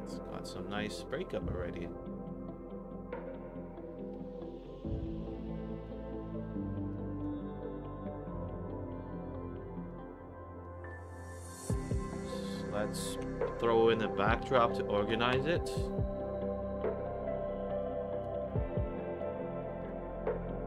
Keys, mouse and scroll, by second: 0.1 alt+middle click, 0.6 alt+click, 1.2 alt+middle click, 4.8 middle drag, 5.4-5.8 drag, 6.0 scroll down 2, 6.2 middle drag, 6.8 click, 7.8 middle drag, 8.2-8.7 middle drag, 9.8 click, 11.4-12.2 drag, 12.4 scroll down 2, 12.6 middle drag, 13.1 Tab, 14.1-15.0 typing, 15.4 Return, 16.7 click, 16.9 click, 17.7 click, 18.4 click, 18.9 click, 19.6 click, 19.7 click.